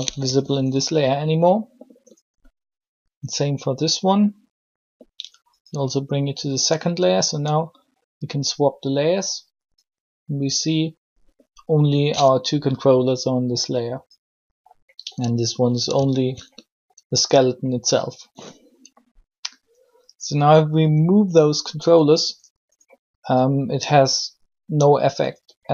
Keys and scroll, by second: 0.2 r.